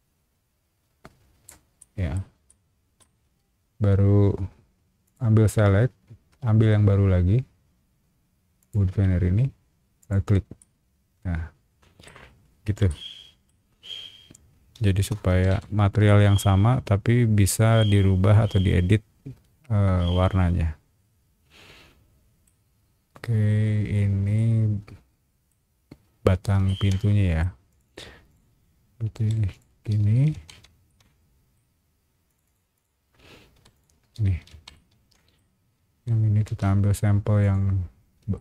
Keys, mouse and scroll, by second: 1.8 middle click, 2.5 middle click, 3.2 space, 5.0 click, 8.6 click, 10.0 click, 10.6-12.0 middle drag, 12.9 middle click, 13.8 scroll down 1, 14.8 space, 15.3 Escape, 15.7 scroll down 1, 16.0-22.4 middle drag, 22.8 scroll up 1, 24.3-25.5 middle drag, 26.6 shift+middle click, 27.7 click, 27.8 click, 28.3 click, 29.2 b, 29.5 click, 30.0 space, 30.3 Escape, 30.9 shift+middle click, 32.3 click, 32.4 click, 32.7 click, 33.5 b, 33.7 click, 34.2 space, 34.5 Escape, 34.7 shift+middle click, 35.6 scroll up 1, 35.9 b, 37.4 alt+click, 38.3 shift+middle click.